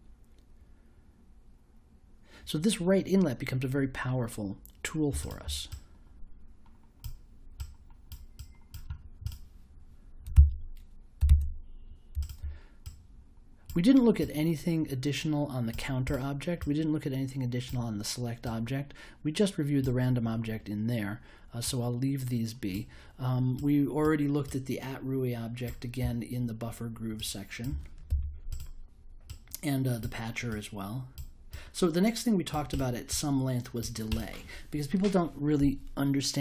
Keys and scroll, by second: 10.3 super+s, 11.2 super+w, 28.0 super+y.